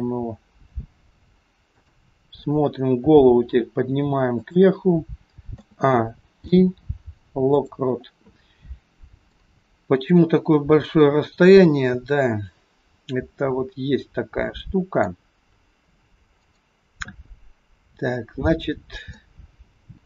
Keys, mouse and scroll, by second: 1.7 click, 3.0 r, 5.6 a, 6.4 i, 9.4 click, 16.5 click, 18.2-19.2 scroll up 4, 19.2 middle click.